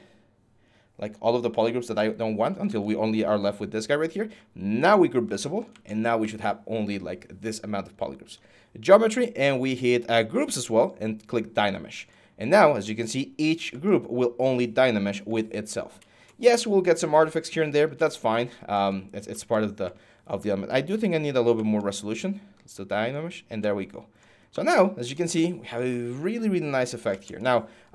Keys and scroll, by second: 19.1 ctrl+z.